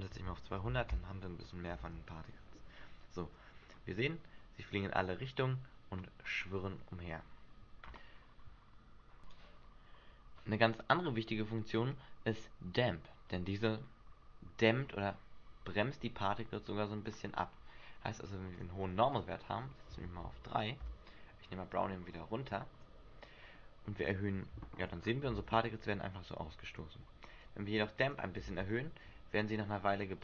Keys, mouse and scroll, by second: 1.8 alt+a, 6.6 Escape, 7.1 scroll down 1, 8.2-8.7 scroll down 3, 18.7 click, 19.3 click, 22.3 click, 25.0-25.6 scroll down 6, 25.5 alt+a, 26.7 Escape, 27.6 click, 28.6 alt+a.